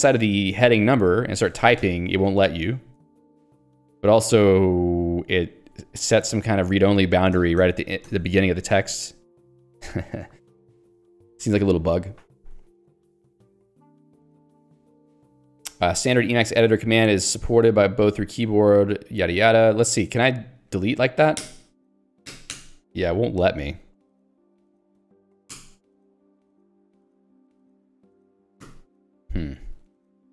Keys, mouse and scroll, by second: 1.6 w, 1.9 f, 2.6 BackSpace, 4.4 Left, 6.6 Delete, 8.8 shift+f, 9.4 Left, 9.7 Down, 19.3 click, 19.5 click, 20.0 click, 20.8 click, 21.5 BackSpace, 23.1 Escape, 23.8 click, 24.1 ctrl+g, 24.9 click, 25.6 BackSpace, 26.2 ctrl+g, 27.1 click, 28.2 click, 28.7 Delete.